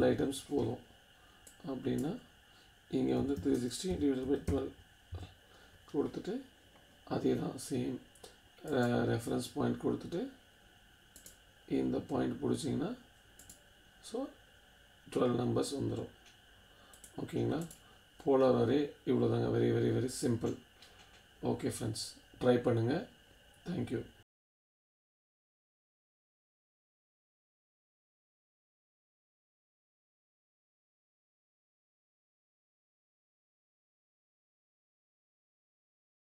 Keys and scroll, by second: 0.0-0.4 typing, 2.9-5.1 typing.